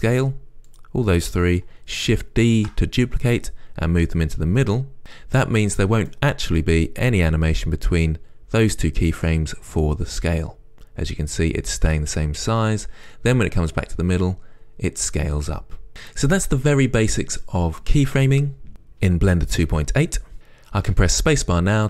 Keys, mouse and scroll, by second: 0.4 shift+click, 0.9 shift+click, 2.8 shift+d, 4.4 shift+d, 6.4-21.8 right drag, 21.1 space.